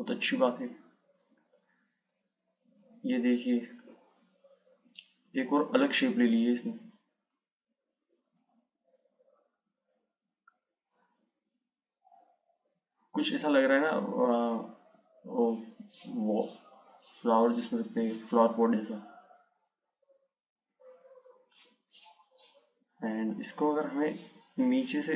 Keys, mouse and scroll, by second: 3.1 click, 7.1 click, 8.7 click.